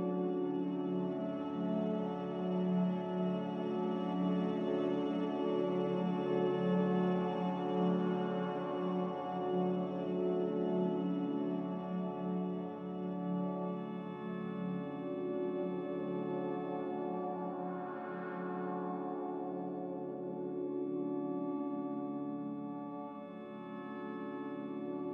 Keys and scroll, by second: 4.8-6.2 typing, 18.7-19.6 typing, 24.2 n.